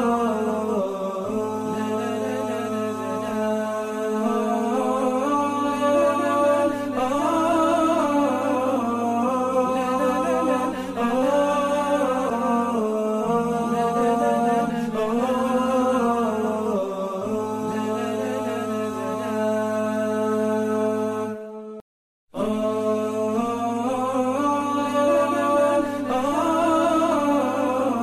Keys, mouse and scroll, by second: 0.0 double click, 1.8 alt+scroll down 1, 4.0 alt+scroll up 1, 4.8 shift+click, 5.4 double click, 7.3 space, 7.6 double click, 7.7 space, 8.8 ctrl+c, 10.3 ctrl+c, 10.4-14.9 typing, 14.5 alt+scroll down 1, 15.1 alt+scroll up 1, 16.2 space, 16.2 double click, 16.8 space, 16.8 alt+scroll up 2, 17.7 alt+scroll up 1, 17.9 ctrl+c, 19.0 ctrl+c, 19.1 shift+click, 19.6 ctrl+c, 20.4 space, 20.8 alt+scroll up 4, 21.4 typing, 21.7 alt+scroll down 1, 22.7 alt+scroll down 1, 23.2 alt+scroll up 1, 24.3-24.8 alt+scroll, 24.8 space, 26.5-26.9 alt+scroll down 3, 27.0 space, 27.5 alt+scroll up 1, 27.8 space, 27.9 double click.